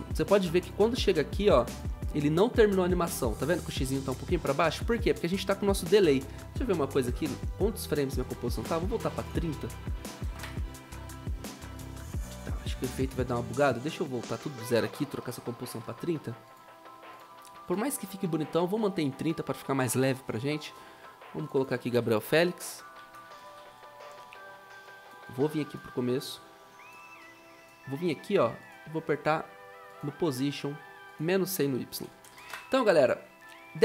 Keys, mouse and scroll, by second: 6.5 ctrl+k, 9.4 ctrl+a, 9.8-10.7 typing, 14.1 Delete, 15.2 ctrl+k, 21.7-25.3 typing, 32.2-32.9 typing.